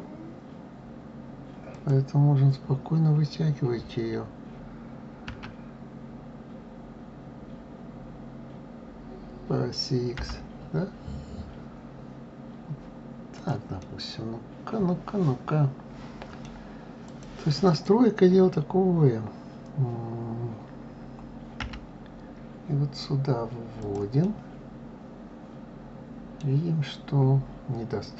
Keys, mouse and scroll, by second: 13.6-16.6 middle drag, 16.8 click, 17.4 click, 24.0-27.0 middle drag.